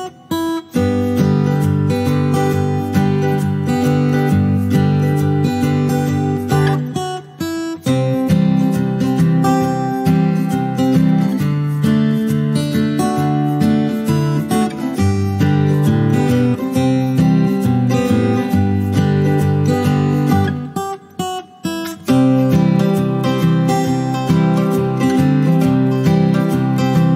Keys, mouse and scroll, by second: 2.6 ctrl+c, 2.8 click, 3.2 t, 3.6 click, 4.6 ctrl+v, 5.2 click, 6.9 ctrl+scroll up 1, 7.2-9.6 drag, 10.8 r, 11.4-12.0 drag, 13.6-15.8 typing, 17.3 ctrl+scroll up 1, 17.8 ctrl+scroll down 1, 18.6-19.2 ctrl+scroll down 1, 19.2-20.8 drag, 25.3 r, 26.2-27.1 drag.